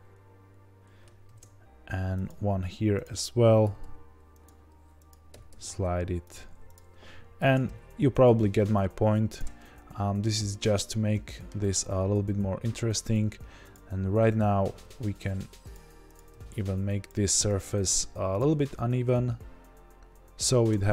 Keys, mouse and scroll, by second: 1.2 ctrl+b, 2.7 1, 3.0 click, 3.6 g, 5.0 click, 5.3 g, 6.7 click, 7.3 ctrl+b, 9.5-13.7 middle drag, 10.8-11.2 scroll down 2, 11.7-13.0 scroll up 2, 13.0-13.7 scroll up 1, 13.7 click, 14.7 g, 16.1 click, 16.3 g, 17.5 click, 17.8 g, 19.9-20.9 scroll down 2.